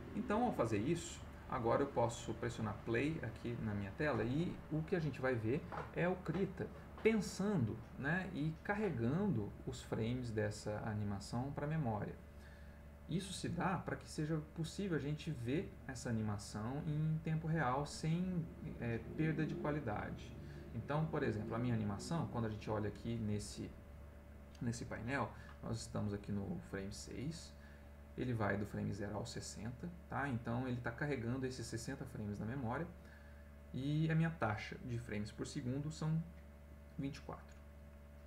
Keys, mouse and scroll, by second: 0.7 click, 2.8 click.